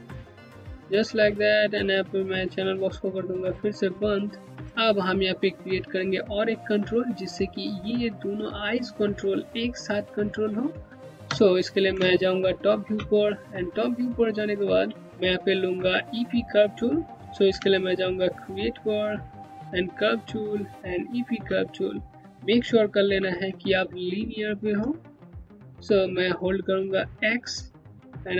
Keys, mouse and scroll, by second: 2.7 click, 3.0-3.8 scroll down 1, 3.8 click, 4.2-4.7 scroll up 1, 10.2-10.9 scroll down 1, 10.9 space, 11.7 click, 12.0 space, 13.2 scroll down 1, 14.6 alt+middle click, 14.8 Home, 17.2 space, 18.0 click, 18.1 space, 18.2 Home, 22.7 t, 25.1 click, 25.8 scroll up 1, 27.2-28.3 typing.